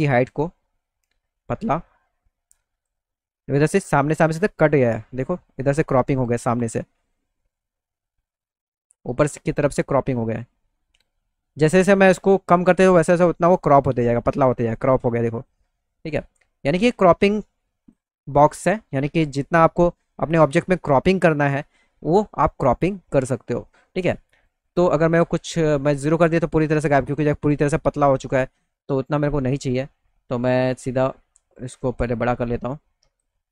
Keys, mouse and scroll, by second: 0.0-2.9 drag, 4.1 middle click, 4.9 alt+middle click, 7.1 alt+middle click, 10.2-14.4 drag, 17.2 click, 19.3 middle click, 20.5 middle click, 24.3 right click, 26.6 middle click, 27.0 middle click, 29.3-33.2 drag.